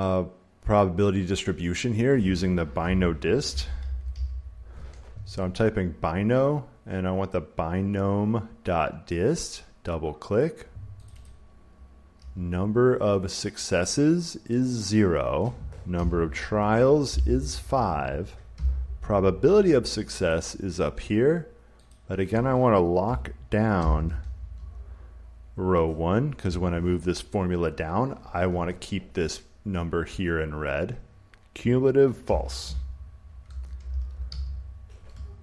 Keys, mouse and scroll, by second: 2.7-4.5 typing, 11.0-13.2 drag, 14.6 click, 15.8 ,, 16.5 click, 17.0 5, 18.4 ,, 20.2 click, 21.8 click, 23.7 4, 24.4 Tab, 26.3 ,, 31.9-35.4 typing.